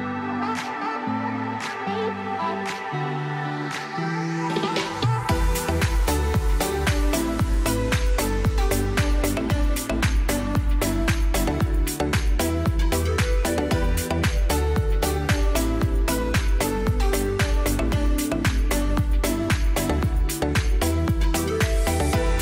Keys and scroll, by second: 0.0 space, 0.1 F4, 0.4 Escape, 1.7 ctrl+z, 2.1 Delete, 9.1 Escape, 10.0 c, 10.1 e, 10.5 shift+F2, 10.8 Escape, 11.7 ctrl+Page_Down, 13.6 shift+Page_Down, 14.6 alt+c, 15.5 F4, 15.6 F3, 15.8 Escape, 18.9 shift+F2, 19.6 F9, 21.4 F9, 21.8 Escape.